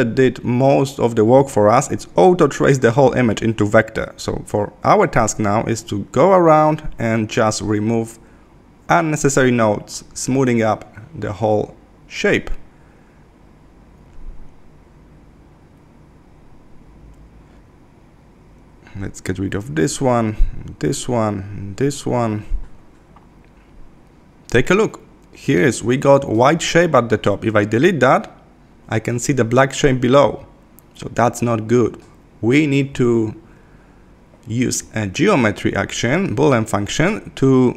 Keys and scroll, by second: 18.3 Left, 20.4 Left, 25.8 BackSpace, 31.0 super+z.